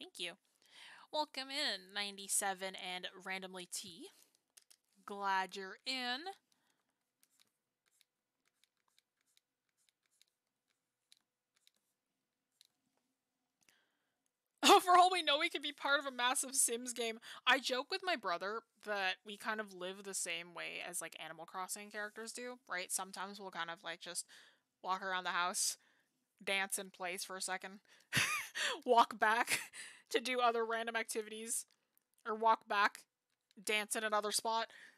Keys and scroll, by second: 6.8 ctrl+z.